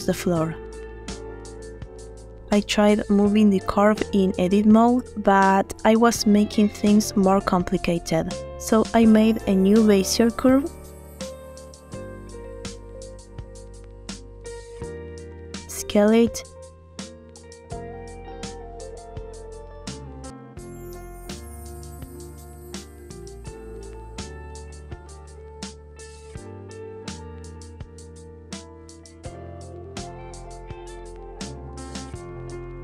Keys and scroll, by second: 1.1 Tab, 11.7 shift+a, 16.1 s, 18.9 s, 22.7 9, 22.7 0, 22.9 Return.